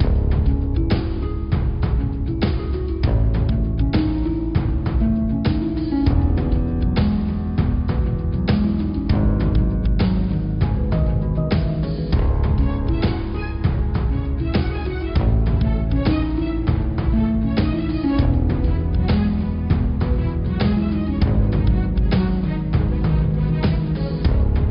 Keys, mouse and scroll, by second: 0.0 click, 0.5-1.1 scroll down 3, 1.1 s, 3.5-4.0 scroll up 7, 5.3 g, 7.5 click, 8.2 click, 8.9 s, 13.1 click, 13.5 middle click, 14.2-14.7 scroll up 1, 14.8 click, 15.3 scroll down 1, 15.3 middle click, 16.0 click, 16.8 g, 19.0 click, 21.0 click, 21.5 click, 21.7 middle click, 22.1-22.5 scroll down 3, 22.5-23.7 middle drag, 23.7 click, 24.5 shift+a.